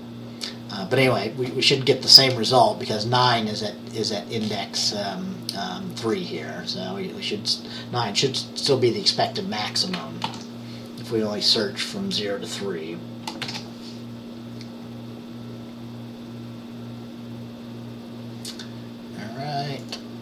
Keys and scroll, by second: 10.4 ctrl+s, 13.5 ctrl+b.